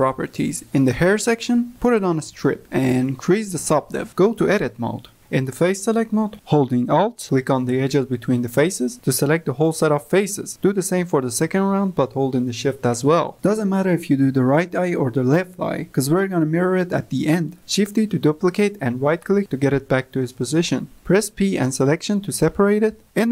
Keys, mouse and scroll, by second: 5.3 Tab, 7.8 3, 9.2 alt+click, 10.4 alt+shift+click, 11.6-12.9 drag, 15.0 shift+click, 17.8 shift+d, 20.1 p.